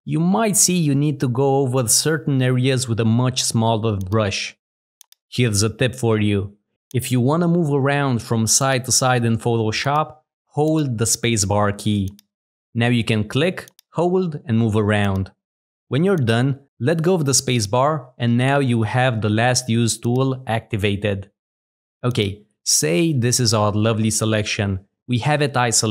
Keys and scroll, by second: 1.7 w, 10.3 space.